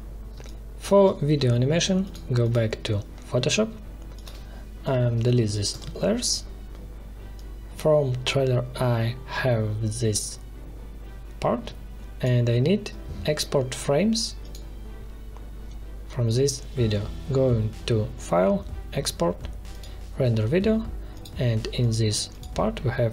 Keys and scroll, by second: 0.3 space, 2.5 space, 5.2 Delete.